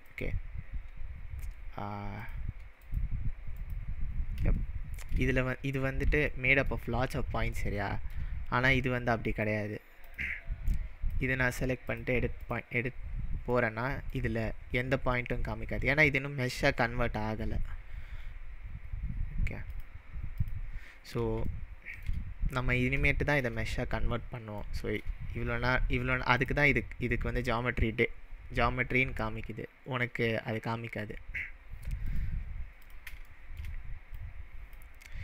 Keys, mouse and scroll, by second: 0.1 click, 2.7 click, 3.0 click, 3.7 click, 4.6-5.1 shift+middle drag, 5.9 scroll up 2, 6.4-6.8 shift+middle drag, 9.3-10.8 drag, 11.9-13.1 drag, 13.0-13.4 scroll up 3, 13.6-14.1 middle drag, 15.5-16.5 scroll down 2, 16.5-18.3 scroll down 2, 19.7-21.5 drag, 21.5-22.0 shift+middle drag, 23.8-24.4 scroll down 3, 24.7-25.1 shift+middle drag, 26.4 click, 32.1-32.9 drag, 33.3-33.8 shift+middle drag, 34.2-34.7 click.